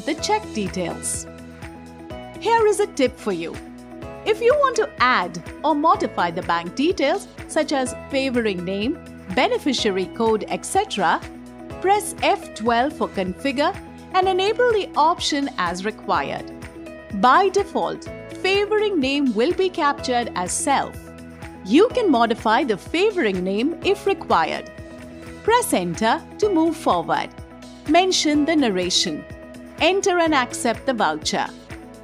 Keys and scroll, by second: 11.7 F12, 25.4 Return.